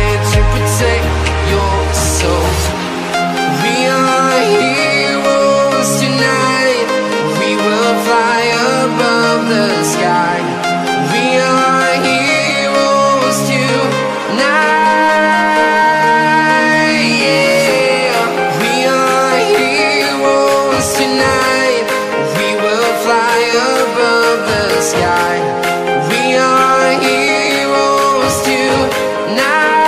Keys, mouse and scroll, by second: 6.2 t, 7.0 ctrl+shift+click, 9.7 Return, 10.8 click, 12.3 Tab, 13.4 click, 15.5 c, 15.6 Tab, 16.7 v, 17.7 click, 19.3 t, 19.8 click, 21.1 Return, 21.5 Left, 22.8 alt+Tab, 23.8 click, 26.4 c, 26.6 Tab, 27.3 click, 28.7 v.